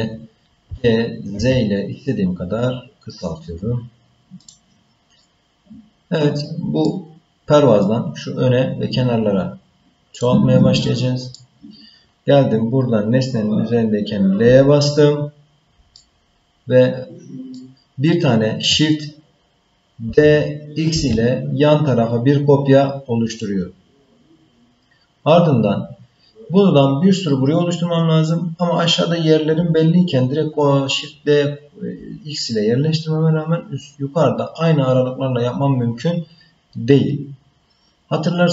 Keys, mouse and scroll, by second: 0.7 g, 5.2-6.8 middle drag, 10.2 click, 10.9 middle click, 14.5 l, 16.0-17.6 middle drag, 20.1 shift+d.